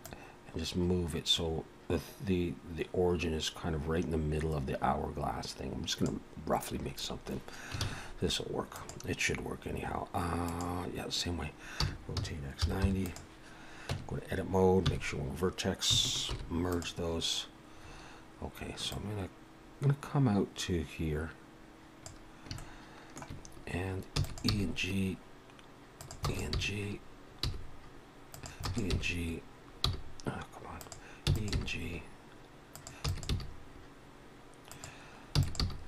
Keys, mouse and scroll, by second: 0.0 click, 7.8 shift+a, 11.9 r, 13.9 Tab, 14.8 1, 16.3 alt+m, 17.8 scroll up 2, 18.9 click, 22.6 shift+middle click, 23.4-24.1 scroll up 3, 24.2 e, 24.5 g, 26.2 click, 26.2 e, 28.6 click, 31.3 e, 31.5 g, 33.0 e, 33.3 g, 35.4 e, 35.6 g.